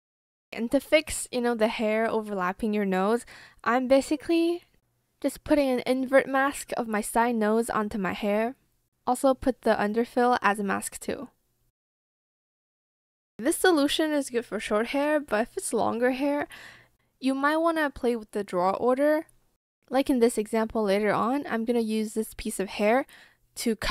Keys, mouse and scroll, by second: 5.1 ctrl+c, 6.3 ctrl+v, 9.4 ctrl+v, 13.0 ctrl+c, 14.3 ,, 14.6 ctrl+v, 14.6 space, 14.9 Return, 16.2 ctrl+z, 17.2 ,, 17.4 space, 17.6 ctrl+v, 17.8 Return.